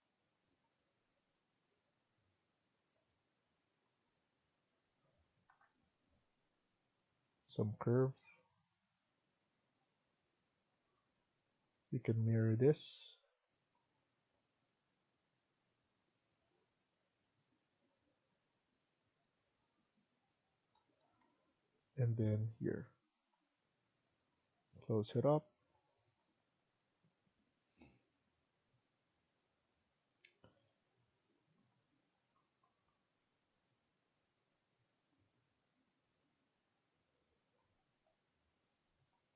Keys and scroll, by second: 3.9 Escape, 4.2 Escape, 4.7 Escape, 5.4 Delete, 10.7 Escape, 11.0 Escape, 11.9 Caps_Lock, 20.6 Escape, 20.9 Escape, 21.1 Escape, 25.2 Escape, 27.1 Escape, 38.6 Escape.